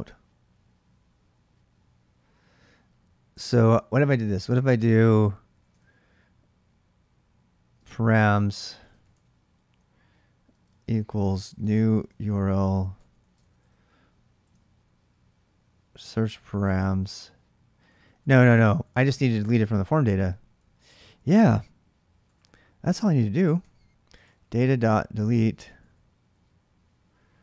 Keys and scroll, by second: 3.5-6.0 typing, 7.7-14.8 typing, 17.4-18.8 typing, 20.1-20.8 typing, 22.0-26.1 typing, 22.6 ctrl+[.